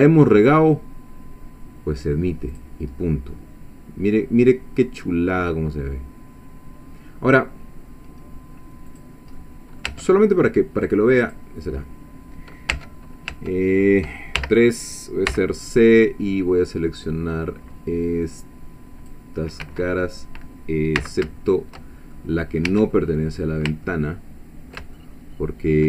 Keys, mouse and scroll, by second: 2.5 click, 3.0 scroll down 2, 3.3-7.3 middle drag, 8.9 click, 9.4 middle click, 9.9 Tab, 11.2 click, 11.7-12.1 scroll up 1, 12.7 Tab, 14.4 3, 15.3 c, 15.8-19.3 drag, 19.6 Escape, 21.0 c, 22.1 shift+middle click, 22.7 Escape, 22.9 middle click, 23.9-24.9 ctrl+middle drag, 25.3 shift+middle click.